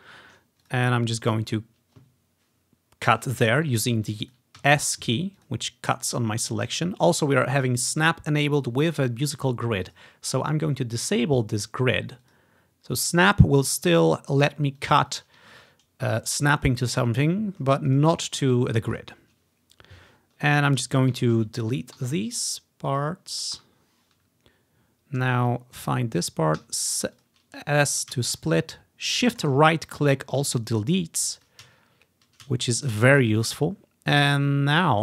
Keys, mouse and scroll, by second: 0.7-1.8 ctrl+drag, 1.1 ctrl+scroll down 1, 4.0-4.9 scroll up 1, 4.4-6.6 drag, 4.7 s, 10.0 click, 11.6 click, 12.3 click, 14.9 click, 15.2 click, 16.6 click, 17.2-19.2 ctrl+drag, 17.5-18.8 scroll down 1, 20.2-21.7 scroll down 1, 22.1 Delete, 23.0 click, 23.4 click, 23.7 Delete, 24.6 click, 25.9-27.4 drag, 26.7 s, 29.5 shift+right click, 31.5 click, 31.8 click, 33.5-35.0 drag.